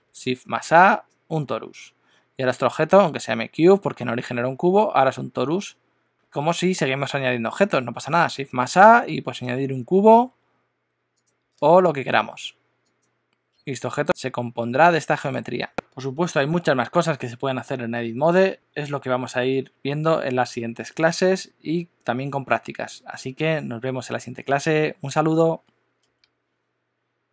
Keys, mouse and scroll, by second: 6.2 shift+a, 10.1 s, 11.5 shift+a, 13.5 s, 15.5 Tab.